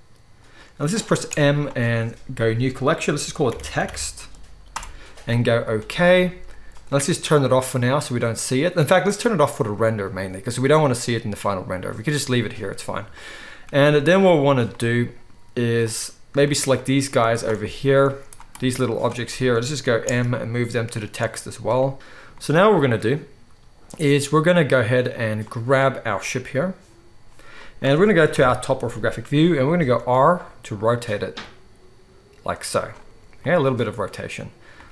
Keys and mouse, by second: 1.2 m, 9.3 click, 9.5-14.8 middle drag, 16.4 shift+click, 16.7 shift+click, 17.5-18.5 middle drag, 18.5-21.9 drag, 20.0 m, 21.9 alt+a, 21.9 right drag, 22.2-34.9 middle drag, 25.3 click, 25.3 right click, 28.3 KP_7, 30.0 r.